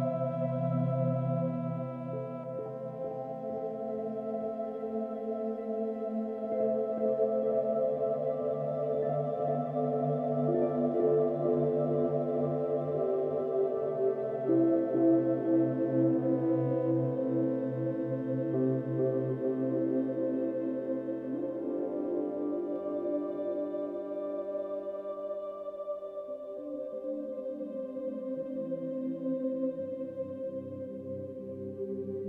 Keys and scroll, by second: 10.4 space, 17.7 space, 21.5 ctrl+-, 21.5 ctrl+=, 21.9 space, 24.4 ctrl+-, 24.5 ctrl+=, 25.1 space, 31.5 ctrl+d, 32.1 ctrl+-, 32.1 ctrl+=.